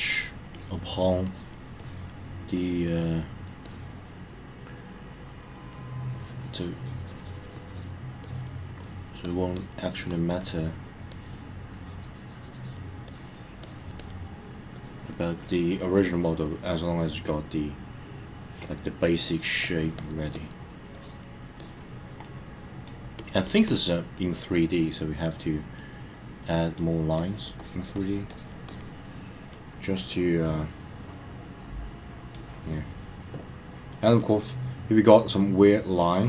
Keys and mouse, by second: 0.1 click, 0.5 click, 1.2 click, 1.8 click, 2.5 click, 3.0 click, 3.6 click, 6.1 click, 7.7 click, 8.2 click, 8.8 click, 9.2 click, 9.5 click, 10.1 click, 10.3 click, 11.1 click, 13.1 click, 13.6 click, 14.0 click, 14.7 click, 15.0 click, 17.1-18.7 middle drag, 19.6 click, 20.0 click, 20.3 click, 20.9 click, 21.6 click, 22.2 middle click, 23.2 click, 23.4 click, 23.6 click, 24.1 middle click, 25.8-26.8 middle drag, 27.2 click, 27.6 click, 27.9 click, 28.3 click, 28.7 click, 29.5-32.3 middle drag, 36.0 click.